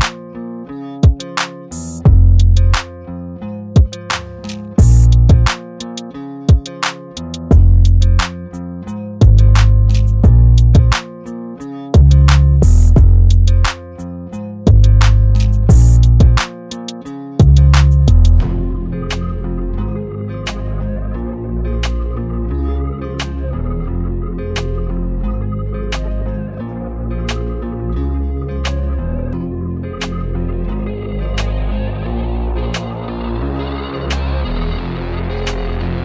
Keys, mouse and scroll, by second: 0.4 shift+space, 1.2 shift+c, 3.1-5.6 typing, 7.0-10.1 drag, 11.5 super+=, 18.1 super+-, 19.3 click, 25.7-26.7 drag, 27.6 right click, 29.9 super+=, 31.0 super+-, 33.0 ctrl+click.